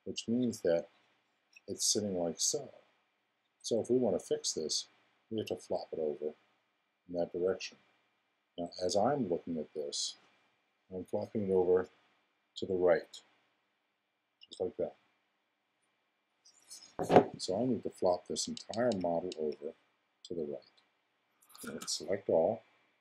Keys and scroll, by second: 21.6 super+a.